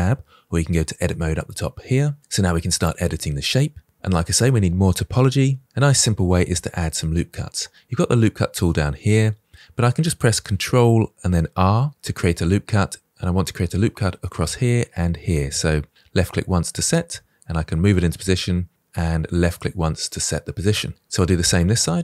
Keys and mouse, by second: 0.9 click, 11.5 ctrl+r, 19.4 click.